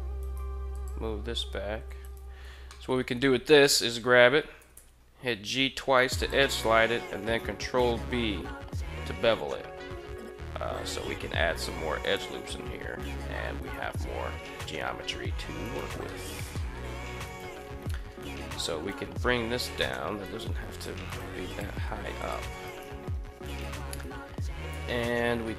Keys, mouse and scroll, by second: 0.1 g, 0.5 click, 1.8 alt+right click, 2.5 shift+middle click, 4.3 g, 4.6 g, 5.9 click, 6.9 ctrl+b, 11.9 click, 13.3 right click, 15.3 right click, 15.9 middle drag, 16.3 middle drag, 17.0 right click, 17.6 KP_1, 18.5 g, 19.5 click, 20.0 right click, 20.2 g, 20.5 click, 20.7 right click, 21.3 click, 21.3 g, 21.5 g, 22.0 click, 22.4 right click, 22.6 g, 23.3 right click, 23.6 alt+right click, 24.4 g.